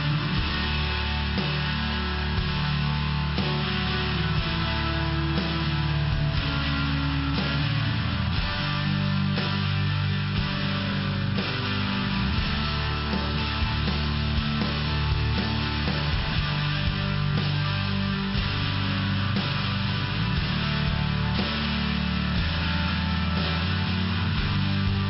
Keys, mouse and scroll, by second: 0.3 click, 1.0 click, 1.2 click, 1.9 click, 2.0 click, 2.4 click, 2.6 click, 2.9 click, 3.4 click, 3.8 click, 4.5 click, 5.0 click, 5.5 click, 5.9 click, 7.0 click, 8.4 click, 9.0 click, 9.1 click, 9.5 click, 9.7 click, 10.3 click, 10.5 click, 10.7 click, 10.9 click, 11.4 click, 11.7 click, 12.5 click, 13.0 click, 15.6 click, 15.7 click, 16.1 click, 16.2 click, 16.6 click, 17.2 click, 17.8 click, 17.9 click, 18.6 click, 18.7 click, 20.3 click, 20.4 click, 21.3 click, 21.4 click, 22.2 click, 22.3 click, 22.9 click, 24.2 click.